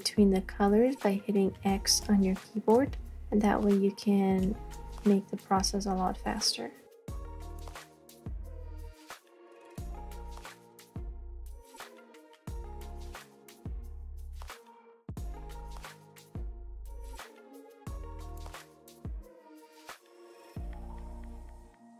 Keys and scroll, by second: 1.5 x, 2.1 space, 2.6 space, 4.5 x, 7.4 space, 9.4 x, 10.9 space, 14.0 x, 16.9 space, 18.8-21.9 typing.